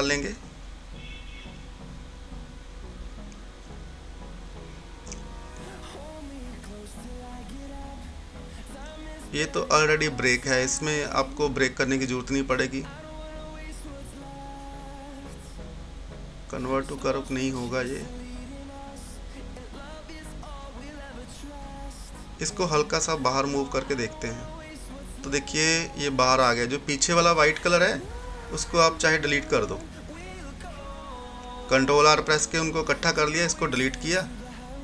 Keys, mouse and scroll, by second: 1.2 ctrl+z, 3.0 ctrl+r, 4.6 click, 5.5 right click, 7.1 click, 11.9 right click, 12.1 right click, 13.9 click, 17.3 ctrl+z, 19.5 F10, 21.7-27.4 drag, 27.4 ctrl+z, 29.7 ctrl+r, 31.3 click, 32.4 Delete, 34.6-34.8 drag.